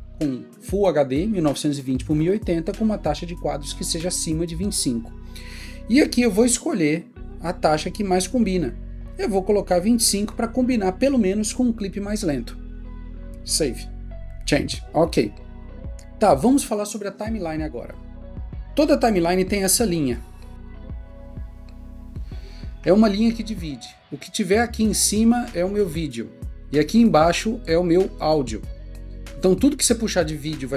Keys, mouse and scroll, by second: 10.3 click, 29.0 double click.